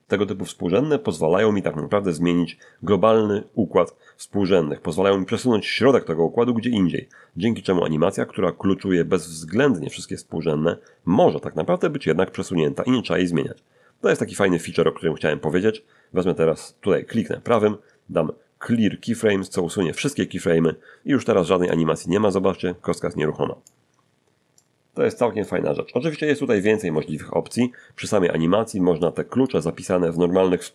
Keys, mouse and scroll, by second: 17.5 right click, 19.4 click, 21.7-23.8 drag, 24.6-25.6 drag, 26.1 0, 26.5 Return, 29.0 click, 30.5 0.